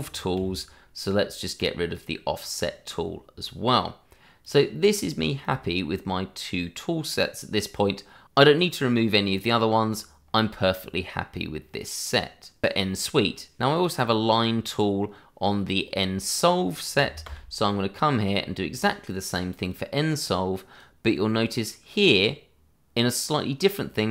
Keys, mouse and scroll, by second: 0.3 d, 1.5 click, 17.2 d, 18.7 click.